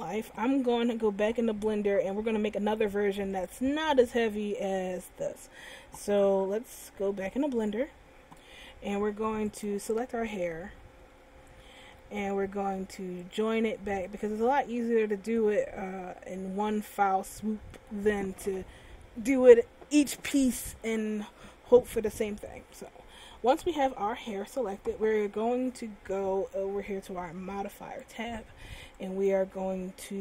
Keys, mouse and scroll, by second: 10.6 right click, 11.5 a, 12.1 a, 13.7 click, 15.9 middle click, 28.2 click, 29.3 click.